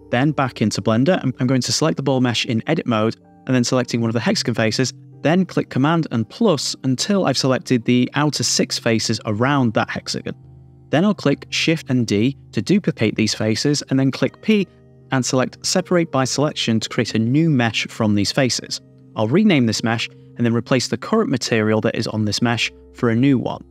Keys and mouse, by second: 2.6 Tab, 2.7 super+KP_Add, 3.1 super+KP_Add, 3.4 super+KP_Add, 3.6 super+KP_Add, 4.0 super+KP_Add, 4.4 super+KP_Add, 4.6 super+KP_Add, 5.5 super+KP_Add, 6.2 super+KP_Add, 7.8 super+KP_Subtract, 13.2 shift+d, 13.7 Return, 14.8 p, 16.7 Tab, 17.2 click, 17.6 click, 19.1 click, 19.9 BackSpace, 20.2 BackSpace, 20.9 BackSpace, 21.6 BackSpace, 23.3 click.